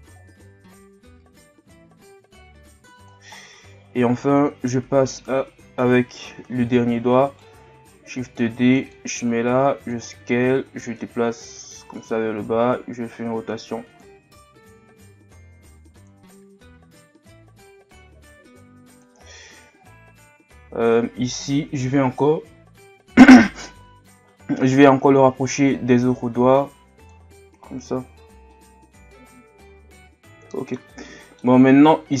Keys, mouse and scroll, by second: 3.3-4.1 scroll down 1, 4.1 right click, 7.9-9.3 drag, 9.3 s, 10.6-12.4 drag, 12.4 r, 14.6-19.6 drag, 19.6-20.2 scroll up 1, 20.2-20.9 scroll up 1, 20.9 right click, 24.2-25.5 scroll up 1, 25.5 scroll up 1, 25.6-27.6 drag, 27.6 Tab, 28.2 scroll down 2, 28.5-31.6 middle drag, 31.6-32.2 scroll up 1.